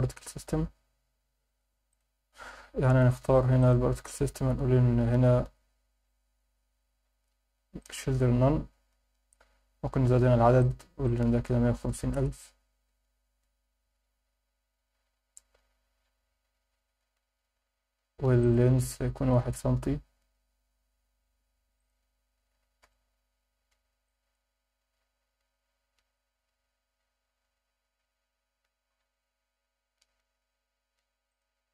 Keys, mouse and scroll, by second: 1.9 click, 3.6 click, 4.8-5.9 scroll down 3, 5.9-7.9 scroll down 5, 7.9-8.4 drag, 7.9-8.4 scroll down 1, 8.4-9.3 scroll up 5, 9.8-10.6 scroll up 1, 10.6-15.5 drag, 10.6-10.9 scroll up 1, 15.5 scroll down 2, 17.6-18.3 scroll up 1, 18.4-20.7 drag, 21.8-23.8 drag, 24.0-25.6 drag, 31.3-31.7 drag.